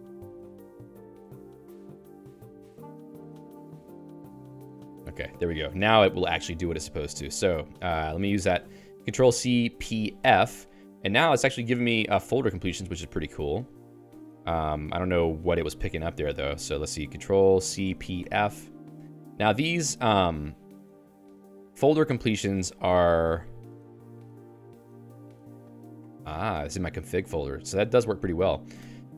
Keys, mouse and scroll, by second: 5.5 ctrl+alt+x, 6.6-8.8 typing, 11.3 ctrl+j, 12.1 BackSpace, 12.7 Tab, 13.2 BackSpace, 13.6 /, 20.1 Down, 20.4 Down, 20.6 Down, 20.7 Down, 20.9 Down, 21.1 Down, 21.2 Down, 21.4 Down, 21.6 Down, 21.8 Down, 21.9 Down, 22.1 Down, 22.3 Down, 22.5 Down, 22.7 Down, 22.8 Down, 23.0 Down, 23.2 Down, 23.4 Down, 23.6 Down, 23.8 Down, 24.0 Down, 24.2 Down, 24.5 Down, 25.3 Down, 25.8 Up, 26.0 Up, 26.2-27.4 Up, 27.6 Up, 27.8 Up, 28.1 Up, 28.3 Up, 28.8 Escape.